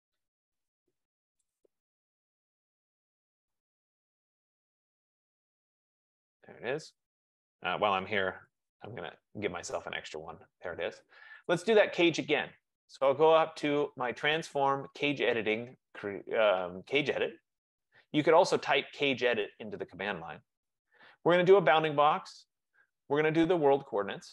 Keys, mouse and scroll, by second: 0.0-0.2 typing, 1.6-3.1 drag, 2.9-4.1 typing, 5.1-6.7 drag, 5.2 Return, 7.5-9.5 typing, 10.3 Escape, 11.2 Escape, 11.5 click, 13.7-14.5 typing, 14.5 click, 17.8 click, 21.9 click, 24.0 click.